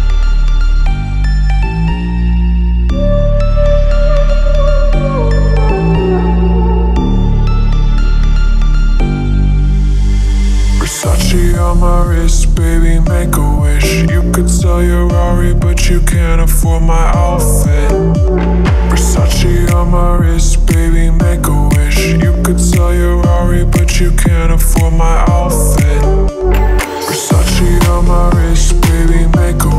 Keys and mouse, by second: 0.0 middle click, 1.7-2.1 middle drag, 2.1 drag, 3.5 middle click, 3.9 click, 4.3-5.7 drag, 10.7 middle click, 11.5 middle click, 12.3 middle click, 13.2 middle click, 15.2 middle click, 16.0 middle click, 18.9 middle click, 19.4 click, 19.6 click, 20.4 middle click, 23.7 middle click, 24.4 middle click, 24.6 middle click, 24.9 middle click, 25.8-27.5 middle drag, 28.3 middle click.